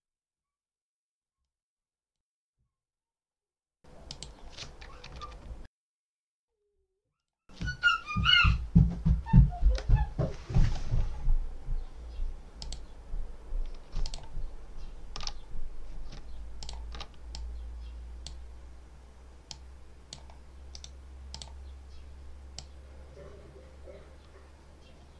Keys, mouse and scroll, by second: 1.3 click, 3.9 click, 4.9 Right, 7.1 click, 8.2 Down, 12.5 click, 13.9 ctrl+alt+click, 16.5 ctrl+alt+click, 17.2-18.3 ctrl+alt+drag, 19.3 click, 20.6 right click, 21.2 click, 22.5-25.1 drag.